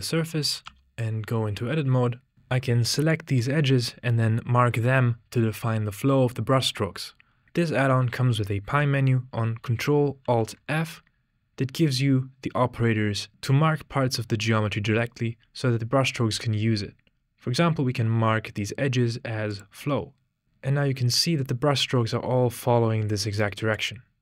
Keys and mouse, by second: 0.9-2.3 typing, 2.9-3.4 shift+drag, 10.2 ctrl+alt+f, 20.4-23.8 drag.